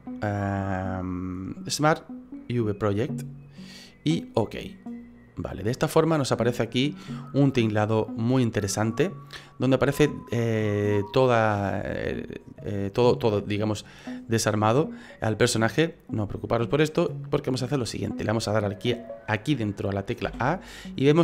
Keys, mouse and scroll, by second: 12.8 middle click, 16.5 middle click, 20.2 a.